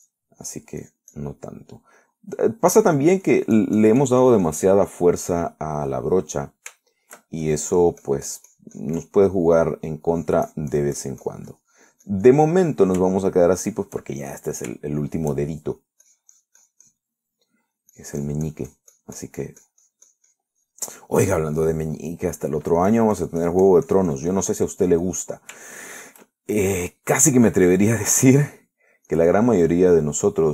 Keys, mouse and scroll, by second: 0.6-1.6 ctrl+drag, 2.1 ctrl+click, 2.7 ctrl+middle click, 3.4 middle click, 4.1 middle click, 4.5-6.2 drag, 6.3-8.7 middle drag, 8.7-11.1 shift+drag, 11.4-13.7 drag, 13.7 middle click, 14.4 shift+middle click, 14.8 shift+middle click, 15.5 shift+middle click, 16.3 shift+middle click, 17.3-19.0 shift+drag, 19.2-22.3 drag, 22.3 middle click, 22.9 middle click, 24.1-25.9 drag, 25.9 middle click, 26.9 shift+middle click, 27.6 shift+middle click, 28.2-30.2 shift+drag, 29.8 middle click, 30.3-30.5 drag.